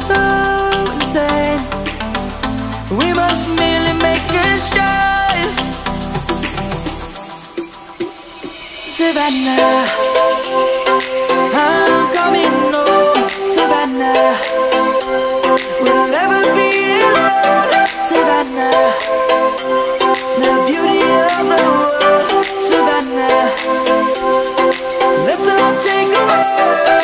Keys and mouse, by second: 5.7 Tab, 8.7 click, 14.6 shift+middle click, 15.3 shift+click, 18.0 ctrl+-, 23.2 middle click.